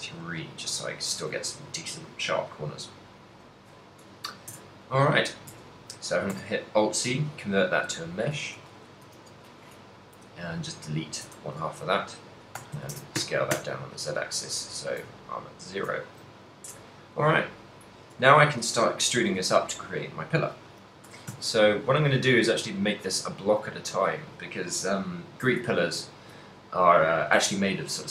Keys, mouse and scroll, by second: 0.0 middle click, 0.4 middle click, 1.6 middle click, 1.9 middle click, 3.4 KP_7, 4.6 Tab, 5.6 Tab, 6.3 alt+c, 7.9-10.2 typing, 8.7 Tab, 11.5 a, 12.6 s, 15.5 ctrl+middle click, 16.4 shift+middle click, 17.9 middle click, 19.3 KP_1, 21.2 e, 24.1 click, 25.8 shift+middle click, 26.2 ctrl+middle click.